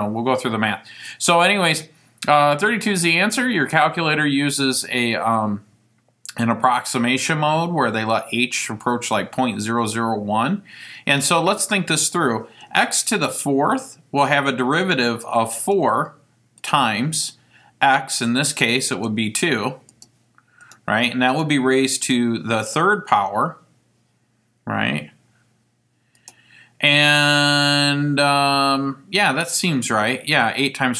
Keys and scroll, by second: 15.7 4, 16.7 *, 19.1 (, 20.1 2, 20.7 ), 21.4 ^, 26.3 3.